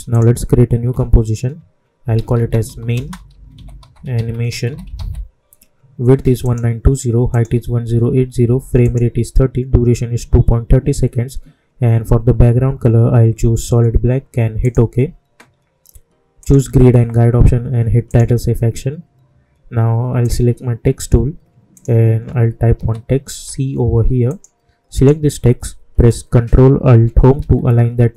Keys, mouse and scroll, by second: 0.1 click, 1.7-4.5 typing, 6.4 click, 14.5 click, 22.7 shift+c, 24.2 click, 27.3 ctrl+alt+Home.